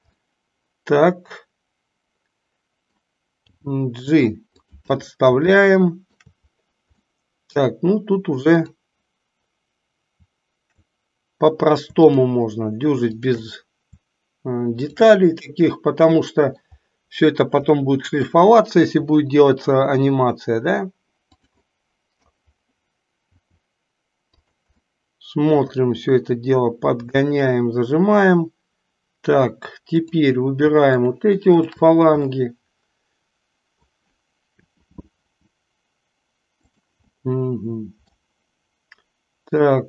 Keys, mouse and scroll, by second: 0.3-3.0 middle drag, 3.4 g, 5.6-6.3 shift+middle drag, 7.1-7.7 middle drag, 8.6 click, 13.2 shift+click, 15.7-16.7 middle drag, 17.8 middle click, 18.9 r, 21.7 middle click, 24.6 r, 24.8-25.8 middle drag, 30.1 click, 31.1 shift+click, 31.6 shift+drag, 32.3-33.8 middle drag, 34.6 r, 37.2-38.2 middle drag.